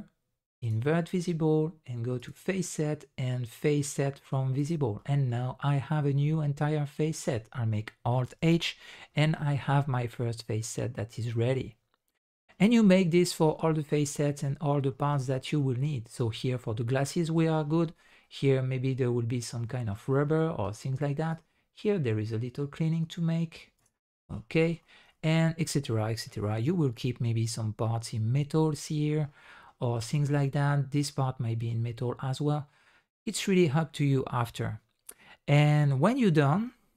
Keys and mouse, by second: 2.2-4.7 drag, 5.0 middle click, 6.2-7.1 middle drag, 8.3 alt+h, 8.6-9.1 middle drag, 9.4 middle drag, 10.2-10.8 middle drag, 11.5-12.5 middle drag, 13.1 middle click, 14.0 middle click, 14.8 middle drag, 15.6 middle drag, 17.0 middle click, 18.2 shift+middle drag, 18.4 shift+drag, 19.7 shift+middle click, 19.9 shift+click, 21.3 ctrl+click, 24.8 shift+click, 25.1 middle drag, 27.0 middle click, 29.5 middle click, 30.0 middle drag, 31.7 middle click, 32.3-32.6 drag, 32.6 middle click, 33.1-33.6 drag, 33.6-35.6 middle drag, 35.6-36.3 drag, 36.3 middle click.